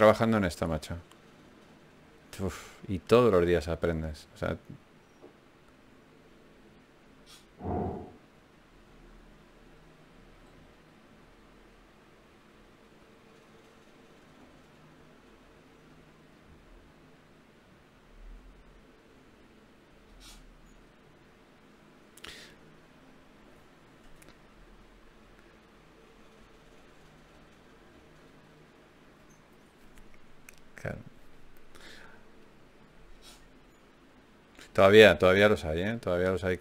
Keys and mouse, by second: 1.0 alt+m, 5.7 g, 7.1 g, 8.7 g, 11.3 g, 12.7 g, 16.2 click, 16.7-20.9 drag, 17.3 g, 17.9 g, 19.5 g, 20.5 g, 21.1-22.7 drag, 21.1-22.1 right drag, 24.3 ctrl+Tab, 25.3-27.0 drag, 27.0 f, 30.4 f, 31.2 f, 33.0 ctrl+z, 34.0 ctrl+Tab, 35.2 right click.